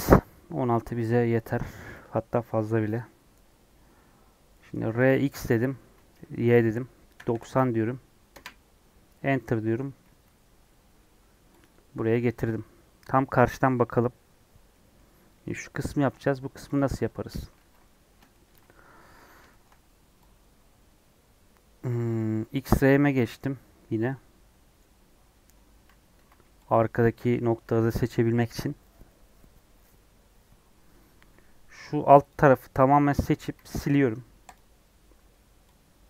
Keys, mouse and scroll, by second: 4.4 scroll down 1, 4.6 middle click, 4.9 r, 9.3 middle click, 10.0 s, 12.0 KP_1, 12.4 KP_3, 16.3 Left, 16.7 Left, 16.8 Tab, 17.2 1, 17.5 alt+z, 18.2 shift+middle click, 18.6-19.3 scroll up 1, 19.4-22.0 shift+middle drag, 22.0 click, 24.8-25.8 middle drag, 25.8 alt+z, 26.1 alt+z, 34.5 x.